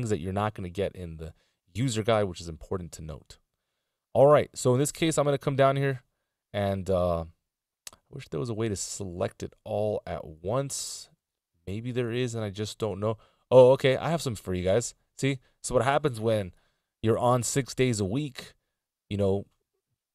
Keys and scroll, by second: 6.1 a.